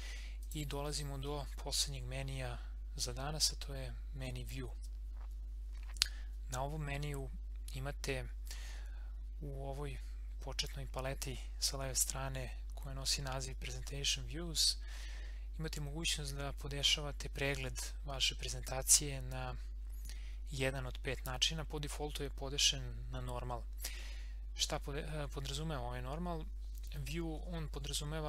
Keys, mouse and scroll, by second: 0.4 click.